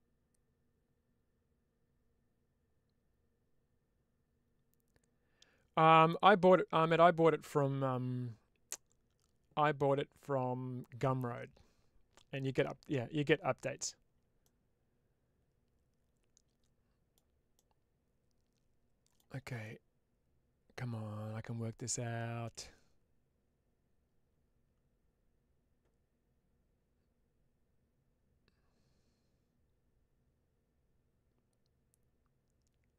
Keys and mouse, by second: 12.4-13.7 middle drag, 14.3-17.0 middle drag, 17.4-19.0 middle drag, 19.5-32.9 middle drag.